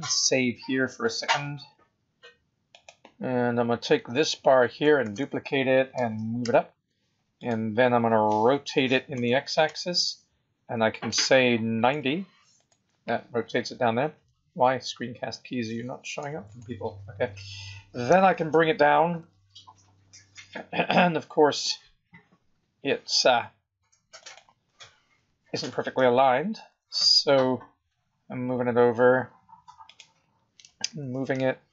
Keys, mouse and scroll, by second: 1.1 click, 5.1 shift+d, 9.3 r, 18.0 g, 25.2 KP_7, 26.6 g, 30.9 g.